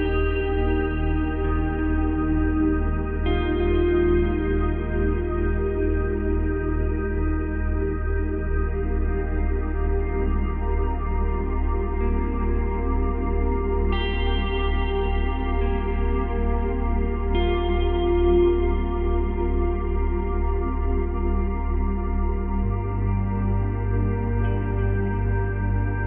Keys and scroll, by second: 13.2 Delete, 17.2 Delete.